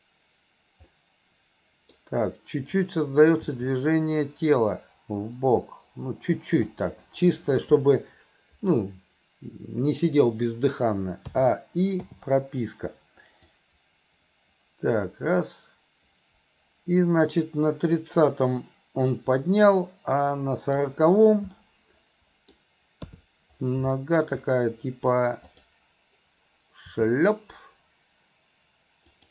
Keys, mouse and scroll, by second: 0.9-2.0 middle drag, 13.5-20.9 drag, 21.6-22.5 middle drag, 24.0 middle drag, 25.5 click.